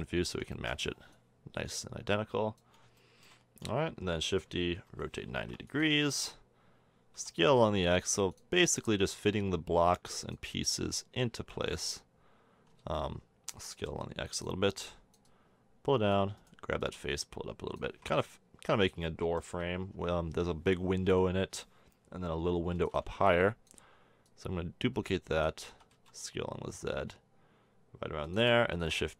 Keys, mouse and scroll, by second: 1.1-2.7 middle drag, 3.0 middle click, 4.1 shift+d, 4.9 r, 6.0 click, 7.1 s, 8.8-10.7 drag, 10.6 s, 12.8 ctrl+z, 13.5 s, 14.8-16.4 drag, 17.9 a, 18.0 Tab, 18.3 drag, 19.2 middle click, 19.9 Tab, 21.0 l, 22.8 shift+d, 23.3 drag, 25.7 s, 28.7 shift+d.